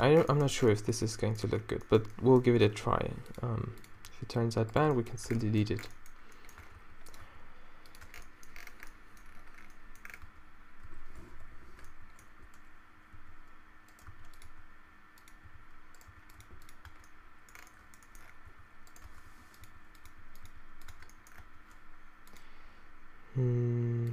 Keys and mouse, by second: 0.5 Tab, 2.7 Tab, 3.0 r, 3.5 g, 5.3 Tab, 5.3 r, 6.7 Tab, 6.8 r, 7.2 g, 8.1 Tab, 10.3 Tab, 10.9 a, 11.5 l, 13.2 g, 14.2 shift+d, 14.5 r, 15.5 g, 16.1 r, 16.5 g, 17.0 Tab, 17.5 middle click, 18.5-20.5 typing, 19.1 Tab, 21.1 Tab, 21.4 Tab.